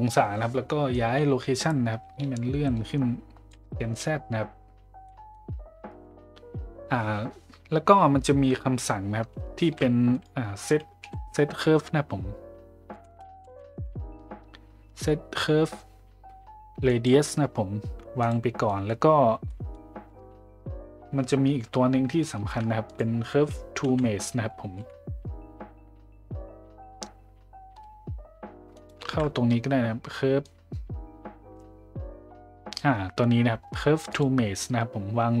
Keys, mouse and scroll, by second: 0.9-3.5 drag, 5.1 middle click, 9.6 shift+a, 18.7 middle click, 19.5 middle click, 22.5 shift+a, 29.0 shift+a.